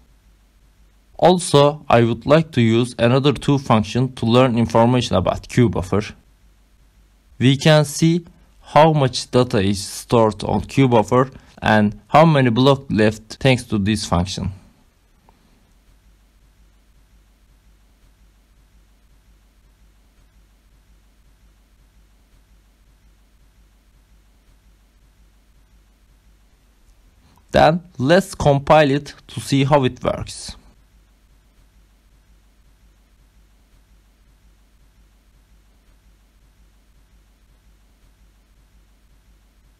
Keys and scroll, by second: 2.8-26.5 typing, 12.4 Right, 20.2 Right, 26.6 Right, 27.7 shift+,, 29.1 Return, 29.7 ctrl+s, 30.5 Up.